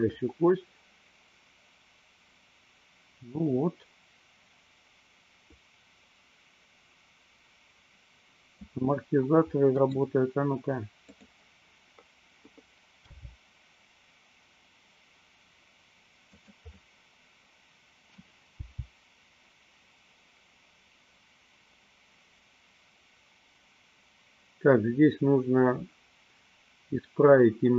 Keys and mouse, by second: 0.0-8.8 drag, 9.9 middle click, 13.2 g, 16.6 click, 16.9-18.3 middle drag, 18.7 g.